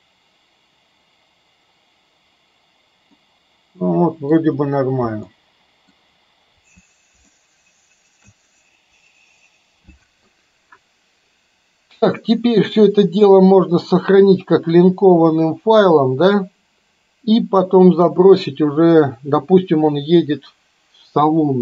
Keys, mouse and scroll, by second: 3.2-4.5 middle drag, 5.3-6.0 middle drag, 7.3-8.3 shift+middle drag.